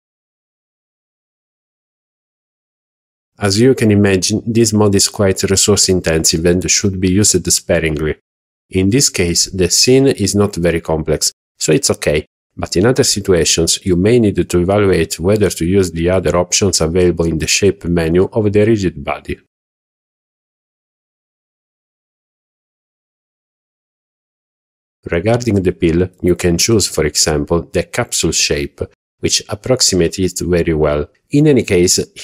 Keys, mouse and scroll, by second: 25.1 click, 27.3-27.7 scroll down 2, 31.0-32.2 drag.